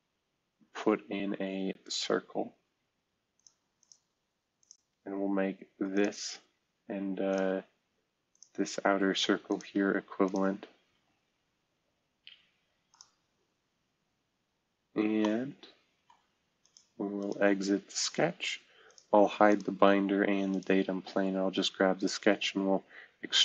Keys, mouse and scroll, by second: 1.9-3.7 middle drag, 3.9 middle click, 4.2 Escape, 8.7 Escape, 10.9 e, 15.2-16.5 middle drag, 16.6 click, 19.1 space, 19.7 space.